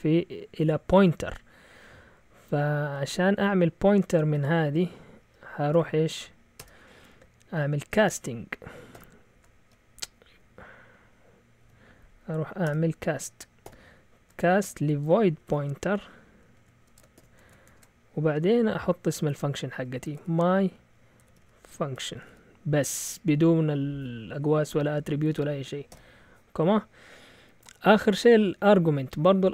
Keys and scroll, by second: 0.7-1.2 typing, 5.4-6.2 typing, 6.5 Return, 7.2 Left, 7.7 Right, 8.0 Right, 8.9 shift+9, 10.1 Down, 10.1-18.1 typing, 19.8-22.7 typing.